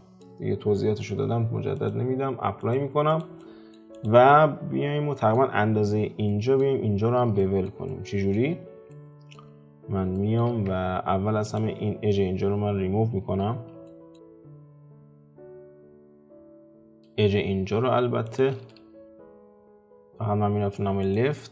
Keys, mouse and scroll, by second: 1.7-3.1 drag, 3.4 middle click, 3.9 click, 4.3-8.5 middle drag, 8.5-8.9 scroll up 2, 8.9 shift+middle click, 9.6-10.1 scroll up 3, 10.1-10.7 shift+middle drag, 10.7 Tab, 11.4 alt+click, 11.9-13.2 scroll down 3, 13.2 x, 13.8 shift+middle click, 14.3-14.6 scroll up 3, 15.1 middle click, 16.0 alt+click, 16.8 alt+shift+click, 18.2 alt+shift+click, 18.7-19.9 middle drag, 19.9-20.6 scroll down 1, 20.6 `.